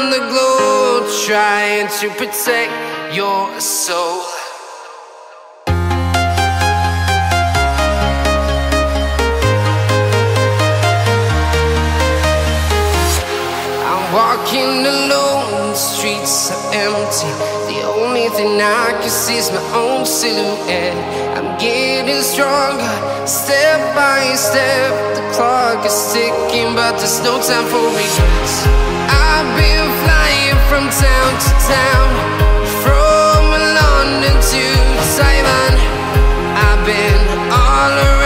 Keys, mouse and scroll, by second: 0.9 scroll up 1, 2.7 click, 3.0 scroll down 1, 3.6-4.1 scroll up 1, 4.3 shift+click, 5.1-5.9 scroll down 1, 7.1 scroll up 1, 7.1 click, 8.1-8.8 scroll up 1, 11.1-15.2 drag, 15.4 scroll down 1, 16.8 scroll up 1, 16.9 click, 17.1 scroll down 1, 18.1 click, 20.5 Return, 21.0 right click, 22.8 scroll up 1, 23.5 right click, 24.9 click, 26.9-27.5 scroll down 1, 28.0 click, 28.1-28.5 scroll down 1, 28.6 right click, 30.0 click, 30.2 right click, 30.7-31.1 scroll up 1, 31.1 click, 31.4-31.7 scroll down 1, 32.5 click, 33.6 scroll up 1, 34.2 right click, 34.9 scroll up 1, 35.5 click, 37.3 right click.